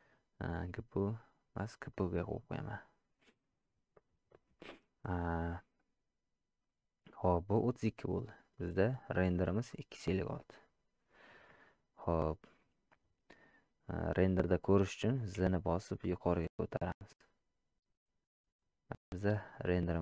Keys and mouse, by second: 1.1-2.2 drag, 8.6 click.